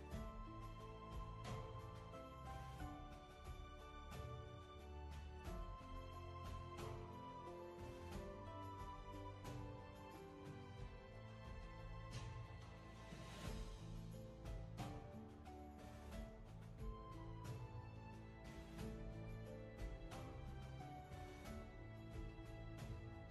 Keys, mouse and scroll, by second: 7.7 ctrl+z.